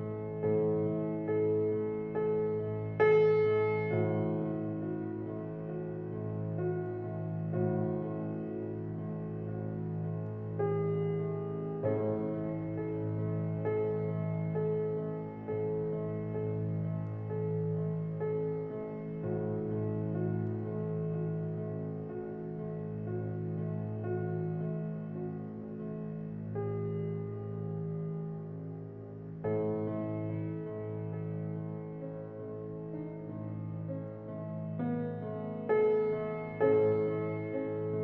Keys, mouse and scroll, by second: 9.5 click, 13.8 click, 15.2-21.7 middle drag, 21.7-22.6 scroll up 1, 22.6-25.5 middle drag, 25.5-32.1 drag, 34.8 click, 35.8-38.0 middle drag.